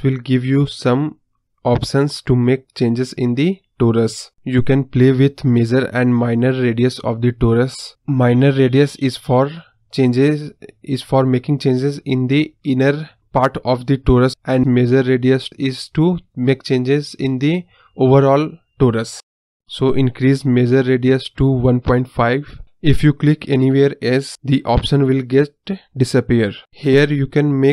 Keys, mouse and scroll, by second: 0.3-1.9 drag, 3.3 right click, 4.2-7.1 drag, 23.0 middle click, 23.1 scroll down 5, 23.2-24.0 middle drag, 24.0 click, 24.5 click, 24.7-26.3 middle drag, 27.4-27.7 scroll up 2.